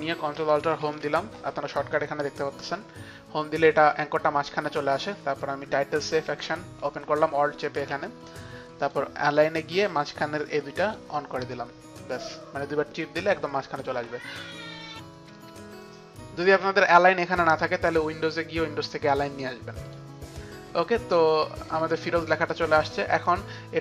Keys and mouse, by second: 0.1 click, 0.6 ctrl+alt+Home, 6.2 alt+click, 8.7 alt+click, 9.7 alt+click, 10.7 click, 18.0 click, 22.9 click.